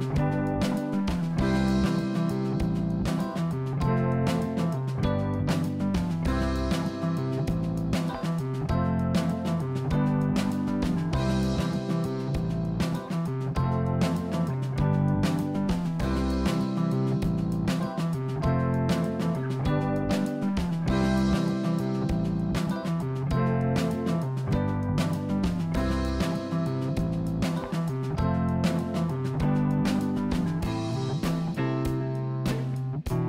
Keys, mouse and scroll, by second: 2.1 click, 5.2 click, 6.2-7.4 drag, 8.3 click, 18.7 click, 19.7-21.4 middle drag, 23.3-25.0 middle drag, 25.4-26.0 scroll up 1, 26.0 click, 26.8 click, 31.7 click, 32.3-33.2 middle drag.